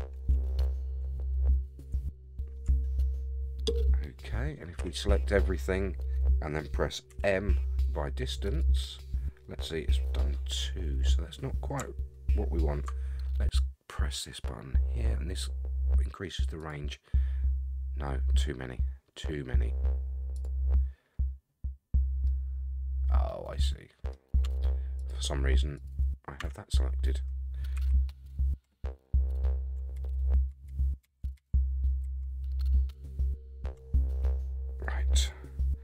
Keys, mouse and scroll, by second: 0.5 shift+middle click, 1.0-1.9 scroll up 6, 2.1 shift+middle click, 4.8 a, 7.1 m, 10.1 middle click, 10.8-11.8 scroll down 5, 16.6 click, 20.3 click, 20.8-22.2 scroll down 25, 22.2-24.1 middle drag, 24.4 Tab, 25.0 click, 25.8 click, 26.4 Tab, 27.7 a, 29.9 ctrl+z, 30.1 ctrl+z, 30.3 ctrl+z, 30.7 ctrl+z, 31.0 ctrl+z, 31.3 ctrl+z, 32.0 ctrl+z, 34.2 g.